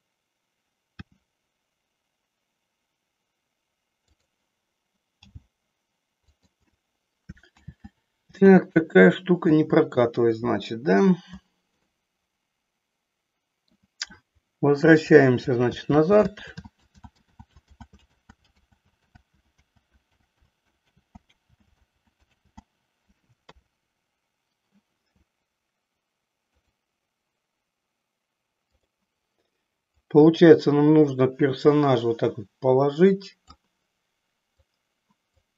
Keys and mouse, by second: 1.1 r, 4.3 click, 5.4 g, 6.4 click, 7.8 ctrl+z, 8.7 ctrl+z, 11.8-13.8 middle drag, 16.2 ctrl+z, 16.5 ctrl+z, 16.9 ctrl+z, 17.8 ctrl+z, 18.4 z, 18.8 z, 19.4 z, 19.8 z, 20.6 ctrl+z, 21.1 ctrl+z, 22.1 ctrl+z, 22.6 ctrl+z, 23.4 KP_3, 28.7 click, 29.9-33.7 drag, 34.4 click.